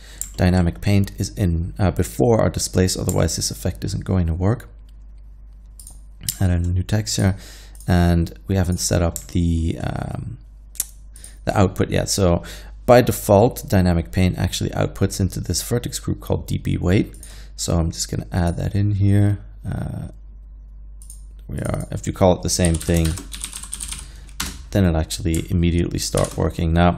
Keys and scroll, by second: 22.7-24.0 typing, 24.5 Return, 26.2 shift+Left.